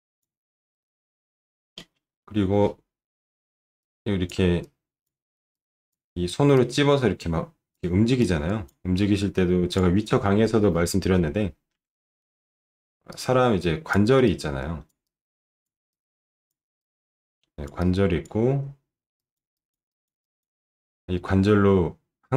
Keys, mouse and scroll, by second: 0.8 alt+middle click, 2.0 middle click, 3.8 click, 4.6 click, 5.5 click, 6.5-7.7 drag, 8.2 click, 9.7 click, 11.8 ctrl+shift+9.